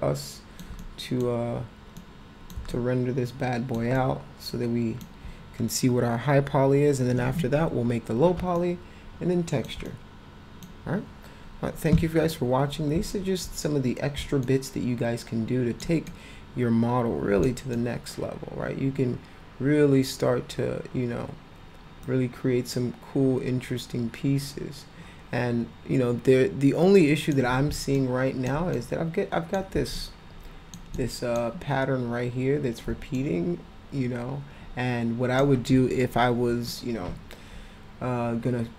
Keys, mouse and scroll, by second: 0.8 middle click, 2.0 middle click, 2.7-3.7 alt+middle drag, 4.0-5.0 alt+middle drag, 8.6-9.6 alt+middle drag, 9.9 middle click, 14.4-15.8 alt+middle drag, 16.1-17.5 middle drag, 17.7-27.3 alt+middle drag, 22.1 alt+click, 28.0 alt+middle click, 28.7 middle click, 30.0-30.8 alt+middle drag, 31.0 middle click, 33.2-35.4 alt+middle drag, 36.8-38.7 alt+middle drag.